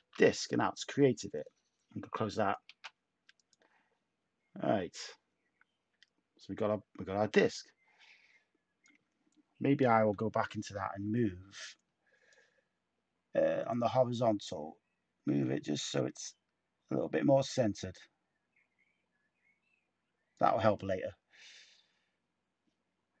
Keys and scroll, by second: 2.6 a, 9.7 d.